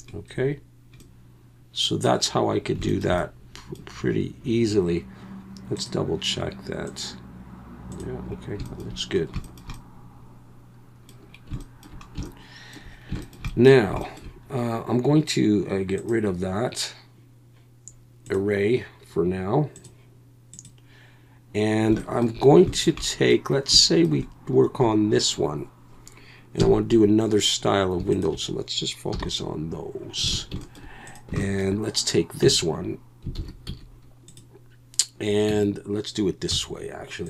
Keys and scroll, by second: 26.6 KP_1, 29.1 /, 30.3 alt+a, 32.4 Tab, 33.4 alt+a, 33.7 z, 35.5 Tab, 36.5 z.